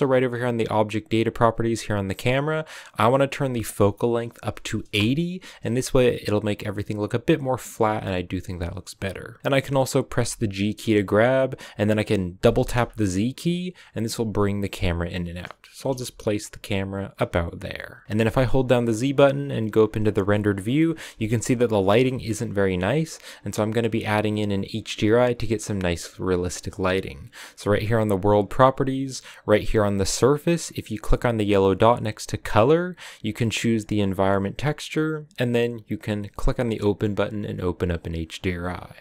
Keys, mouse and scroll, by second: 1.2 click, 3.2-6.2 drag, 8.4 click, 10.0 g, 15.7 g, 18.0 shift+middle click, 18.2 z, 20.2 middle click, 21.0 a, 21.3 scroll down 4, 21.5 middle click, 21.8 a, 22.0 middle click, 22.5-22.8 scroll up 5, 28.1 click, 32.4-35.4 drag.